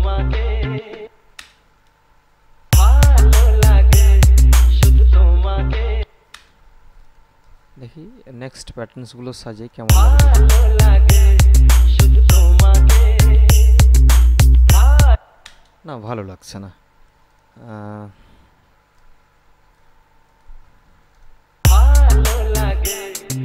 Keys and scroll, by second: 1.3 space, 2.9 space, 6.2 space, 10.0 space, 15.3 space, 21.8 space.